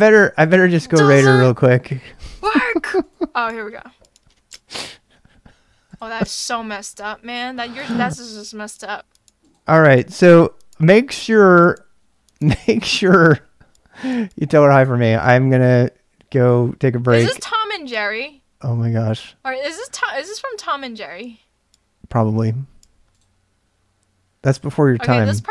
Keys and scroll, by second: 9.8-10.5 typing.